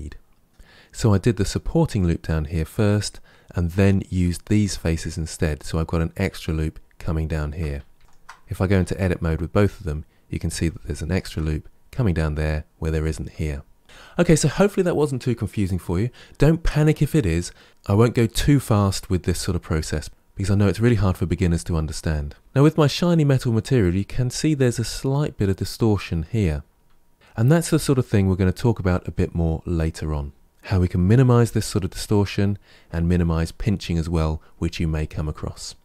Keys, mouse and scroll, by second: 0.1-0.4 scroll down 2, 7.8 Tab, 8.0 shift+click, 8.7 Tab, 10.7-13.7 shift+middle drag, 13.8-16.8 shift+middle drag, 22.4 shift+middle click, 22.5-23.3 scroll up 3, 27.1 Tab.